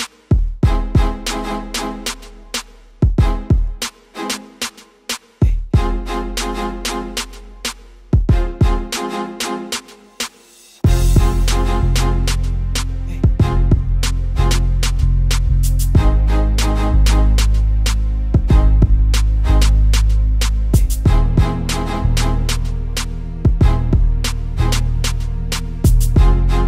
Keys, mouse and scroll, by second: 0.3 KP_0, 2.1 BackSpace, 2.3 KP_0, 3.2 click, 5.3 click, 6.0-6.7 scroll down 4, 7.3-8.0 scroll up 5, 8.0 click, 9.2 click, 11.0 click, 11.8 click, 13.2 click, 15.5-18.7 drag, 20.6 KP_8, 21.5 click, 21.8 KP_0, 22.8 click, 24.2 click, 25.3 click, 26.5 click.